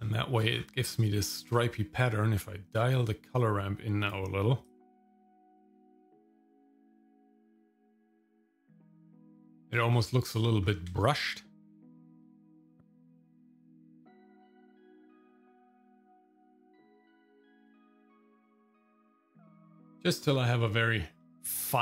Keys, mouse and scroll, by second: 0.2 shift+middle click, 0.6-1.6 scroll up 3, 2.8-4.2 drag, 4.6-6.2 drag, 7.1-9.4 drag, 9.8 middle click, 9.8-10.3 scroll down 4, 10.4 middle click, 10.6 scroll up 2, 11.0 shift+middle click, 11.5 middle click, 12.3 scroll up 1, 12.8 click, 13.0 click, 13.9 click, 14.2 click, 14.6 click, 15.6 click, 15.9 click, 16.1 click, 16.4 click, 17.1 click, 17.5 click, 17.6 KP_0, 18.2 click, 18.5 scroll down 3, 18.7 scroll up 1, 18.8 shift+middle click, 19.1 click, 19.3-20.1 scroll up 3, 20.1-20.5 scroll down 2, 21.2 middle click, 21.6 scroll down 1.